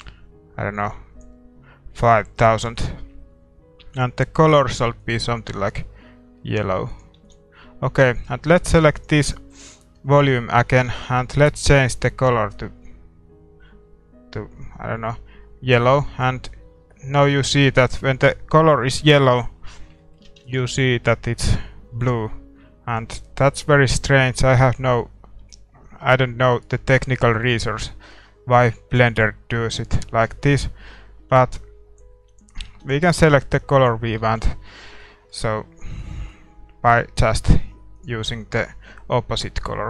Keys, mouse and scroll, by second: 5.0 ctrl+s, 5.0 click, 6.9-8.9 drag, 7.2 ctrl+s, 8.9-12.5 right drag, 12.5 ctrl+s, 12.5-13.6 drag, 20.0-21.9 middle drag, 20.5-22.2 drag, 20.5 ctrl+s, 23.9 click, 32.3-35.5 drag, 32.7 ctrl+s, 35.0 ctrl+s, 35.0-37.7 middle drag, 37.4-39.8 drag.